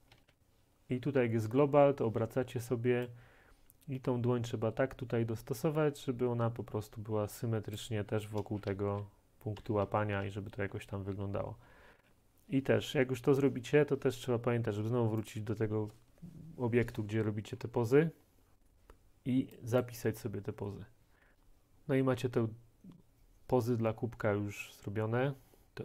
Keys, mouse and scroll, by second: 0.0-0.3 typing, 3.1 right click, 7.8-12.6 right drag, 8.5-12.0 typing, 13.4-17.0 right drag, 15.4-17.0 drag, 17.0 scroll, 17.6 click, 17.6-18.0 click, 17.9 click, 17.9 click, 19.9 click, 21.4-23.9 drag.